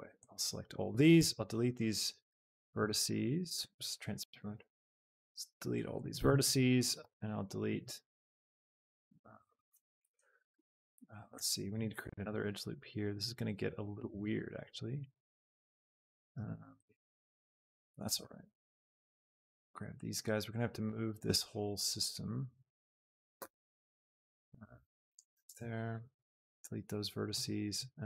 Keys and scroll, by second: 1.3 x, 3.5 Escape, 6.1 x, 11.2 Escape, 12.3 ctrl+r, 14.2 Escape, 14.9 ctrl+z, 18.2 shift+x, 25.6 x.